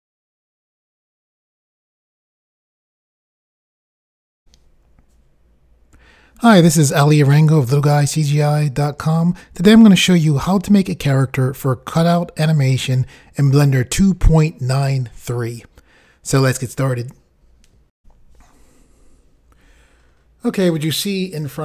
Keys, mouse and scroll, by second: 4.4 Pause, 18.0 Pause.